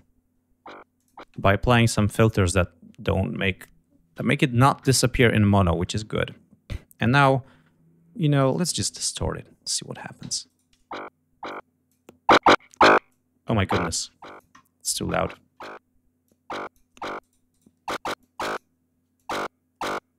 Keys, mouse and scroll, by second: 0.8 click, 1.6 space, 1.8 right click, 5.7-6.0 scroll down 2, 6.8-7.4 scroll down 2, 8.4 click, 10.1 l, 10.3 right click, 11.3 click, 12.9-14.4 drag, 15.2 click, 16.1 click, 17.0 right click, 18.0 click, 19.0 click.